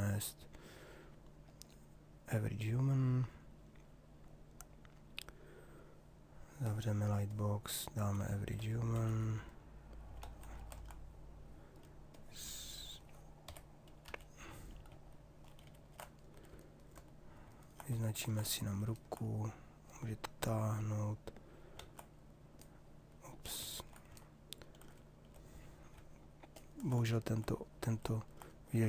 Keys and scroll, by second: 8.7 shift+h, 10.2 ctrl+z, 13.4 y, 14.1 t, 15.6 ctrl+n, 21.3 ctrl+z.